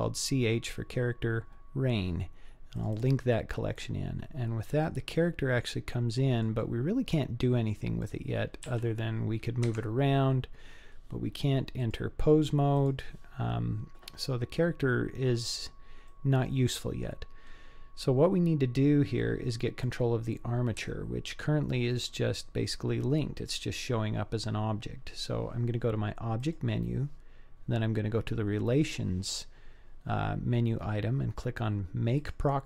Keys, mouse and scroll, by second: 4.4-5.4 scroll up 6, 5.4-5.9 scroll up 1, 5.9-6.4 middle drag, 6.9-7.5 scroll down 3, 7.4 scroll up 2, 8.0 click, 8.6 g, 11.8-12.9 drag, 14.4-15.4 scroll up 4, 15.4-15.8 scroll down 3, 16.1-17.1 middle drag, 17.6-18.3 scroll down 1, 19.2 middle click, 20.9-21.9 shift+middle drag, 26.4-32.6 drag.